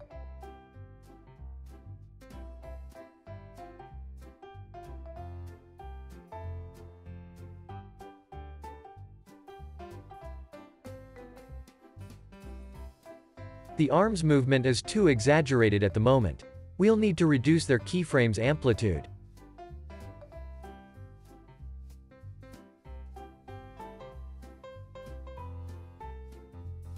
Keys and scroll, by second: 10.7 space, 14.7 space, 14.9 super+s, 15.4 z, 18.8 space, 25.1 space, 25.4 super+s.